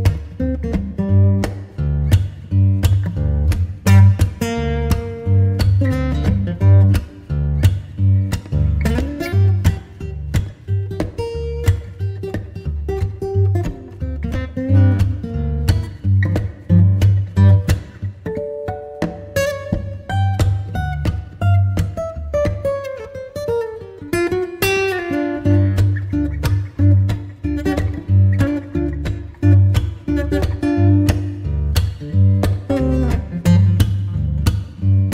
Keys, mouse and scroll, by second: 17.9 n, 21.0 n, 23.8-32.7 drag.